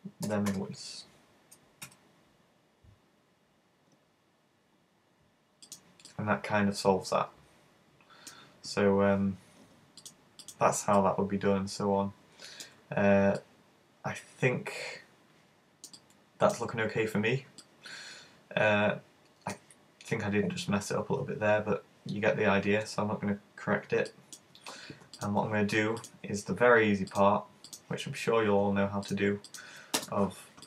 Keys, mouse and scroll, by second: 0.3 g, 5.8 click, 6.1 middle click, 9.0 scroll down 1, 10.1 click, 11.1 middle click, 12.9-13.4 scroll down 3, 13.4 middle click, 16.1 middle click, 17.1-17.7 scroll down 2, 17.7 middle click, 17.7 scroll down 1, 22.5-24.1 scroll up 1, 24.1 middle click, 24.1 scroll up 1, 25.2 right click, 26.1 right click, 27.2 click, 27.8 click, 29.1 right click, 29.5 shift+right click.